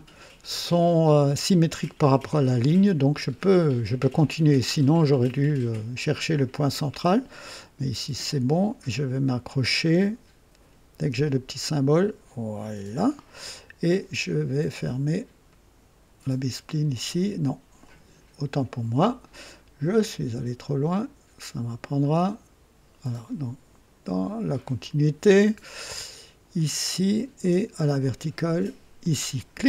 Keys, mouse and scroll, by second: 12.5 click, 15.4 click, 17.7 click, 19.9 click, 21.9 click, 24.7 click, 26.5 click, 28.9 click, 29.5 right click.